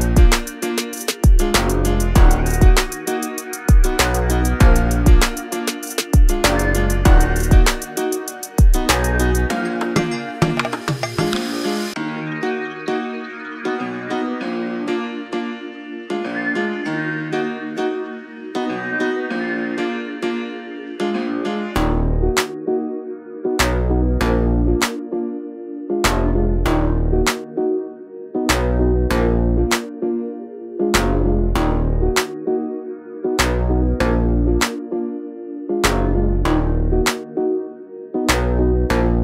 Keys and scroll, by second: 1.3 space, 1.6 p, 5.3 space, 15.6 Delete, 17.2 Delete, 20.9 l, 22.9 space, 24.3 m, 25.7-27.3 typing, 27.4 Escape, 32.3 space, 32.4 Escape, 36.3 r, 38.7 l.